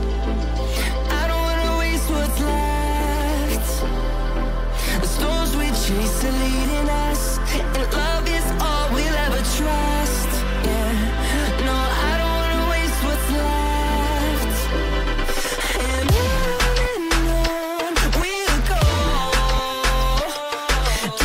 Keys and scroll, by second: 1.6 ctrl+g, 2.1 c, 6.7 shift+F2, 7.1 shift+Page_Up, 7.4 F3, 9.6 e, 12.9 F4.